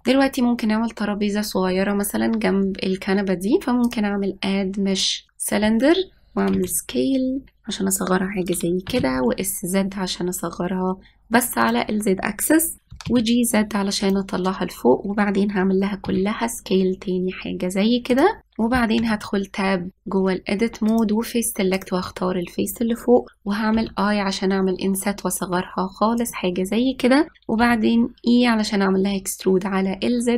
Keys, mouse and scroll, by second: 0.0 ctrl+s, 0.1 shift+middle click, 0.6-1.2 scroll up 1, 4.5-5.7 drag, 7.2 s, 9.5 s, 13.5 g, 15.1-15.7 scroll up 1, 16.7 s, 18.5-19.4 shift+middle drag, 19.6 Tab, 21.5 click, 28.2 e.